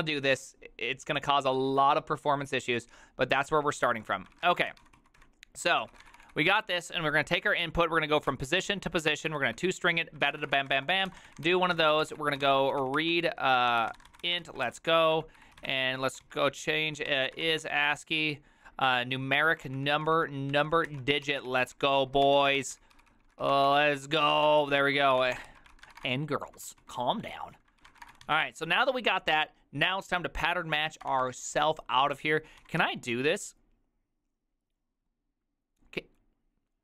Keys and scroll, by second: 4.2-9.2 typing, 10.3-28.7 typing, 21.4 ctrl+c, 23.0 ctrl+c, 23.3 ctrl+c, 26.1 Return.